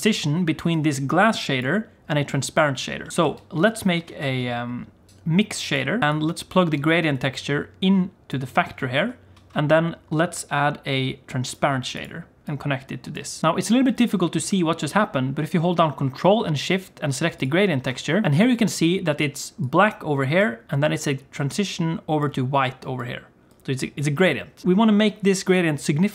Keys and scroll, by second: 19.2-20.6 d, 22.2 d, 22.3-24.6 d.